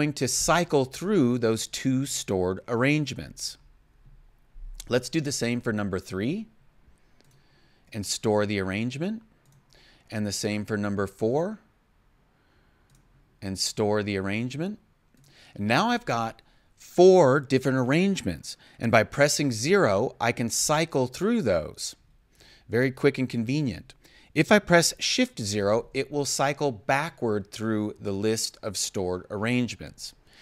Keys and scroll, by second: 3.1 0, 19.4 0, 25.3 shift+0.